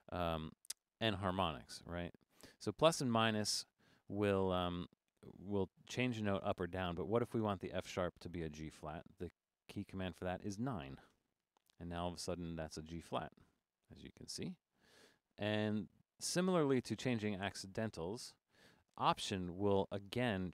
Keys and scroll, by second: 1.6 Down, 2.2 Up, 4.9 Up, 6.8 Up, 7.2 Down, 11.1 9, 13.7 Right, 13.8 Right, 15.5 Left, 15.6 Left, 15.7 Left, 16.4 Right, 16.6 Right, 17.1 Left, 17.5 Down, 18.4 9.